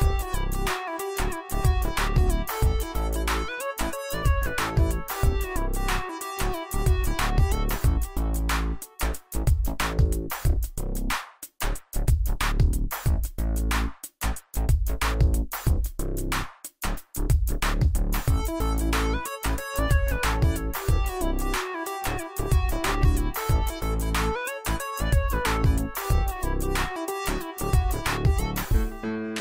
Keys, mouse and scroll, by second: 2.8-4.3 drag, 11.6 Caps_Lock, 14.4 shift+v, 16.4-18.7 typing, 20.1 Caps_Lock, 20.6 click, 22.4-23.4 alt+shift+drag, 26.5 shift+v, 28.1 click.